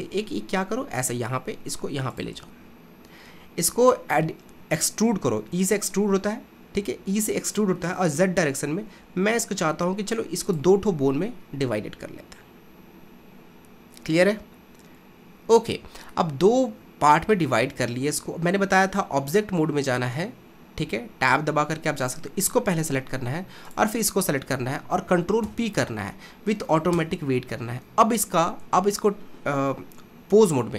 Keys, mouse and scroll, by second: 4.5 e, 13.0-16.0 scroll up 1, 16.2-19.0 shift+middle drag, 19.0 Tab, 22.0 click, 23.7 shift+click, 25.4 ctrl+p, 28.6 ctrl+Tab.